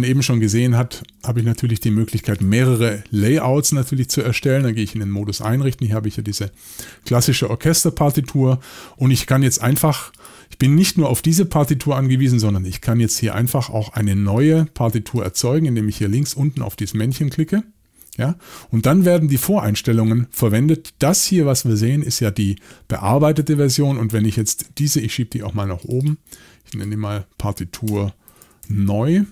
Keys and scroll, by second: 2.7 x, 28.0-29.1 typing.